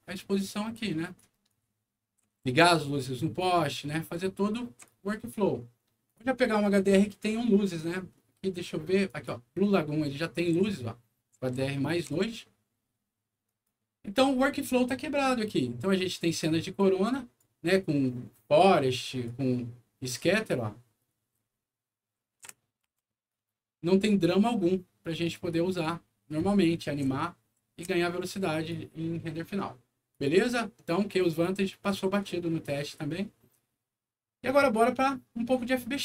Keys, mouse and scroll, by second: 1.4-2.6 right drag, 1.6 a, 2.5 d, 3.3-4.8 right drag, 4.1 a, 6.0 click, 9.0 click, 10.3-11.5 typing, 10.4-12.1 right drag, 13.4 right click, 15.4 right click, 17.0 right click, 18.6 right click, 20.0-23.2 right drag, 20.2 w, 21.3 q, 23.9 right click, 25.2 right click, 26.9 right click, 27.1 e, 27.5 a, 28.2 right click, 30.1 click, 31.3 click.